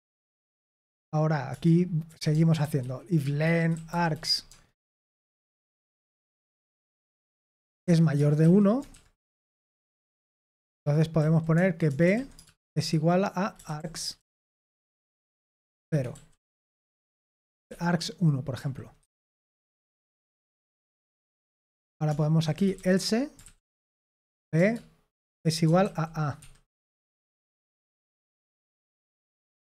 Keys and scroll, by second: 0.4-4.7 typing, 7.4-8.9 typing, 9.8 Return, 10.4 Tab, 11.1-16.9 typing, 17.6 Escape, 18.3-19.7 typing, 19.7 Escape, 21.5-23.2 typing, 24.5-27.4 typing, 26.3 Escape, 29.3 typing.